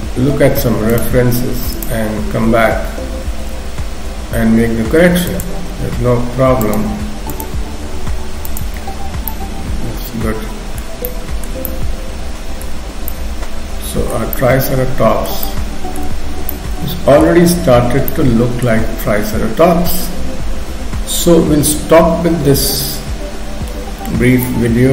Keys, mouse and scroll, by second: 0.9 click, 5.3 click, 9.3 middle click, 11.0 shift+middle click, 11.7 middle click, 13.1 middle click, 13.4 shift+middle click, 15.4 shift+middle click, 16.5 middle click, 18.1 shift+middle click, 24.4 middle click.